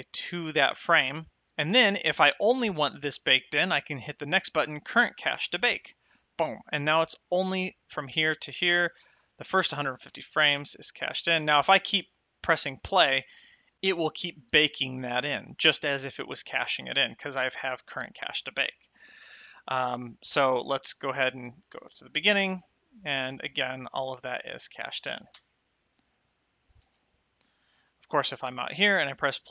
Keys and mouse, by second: 5.8 click, 10.3 space, 22.6 space, 25.7 space, 26.1 right click, 27.1 space, 28.3 click, 29.0 space.